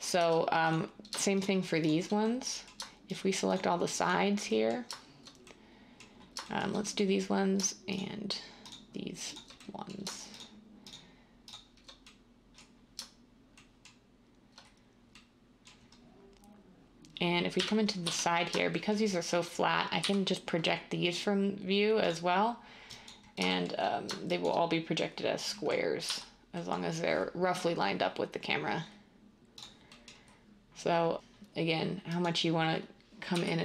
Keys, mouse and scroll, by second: 0.2 Tab, 17.5-18.0 typing, 20.0 u, 26.0 z, 33.3 g.